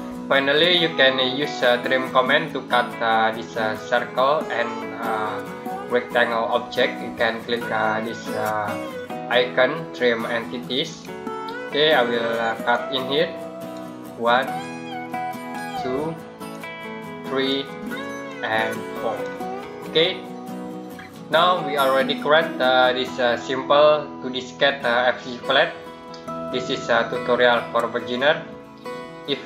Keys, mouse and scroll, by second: 10.7 click, 20.0 scroll down 1.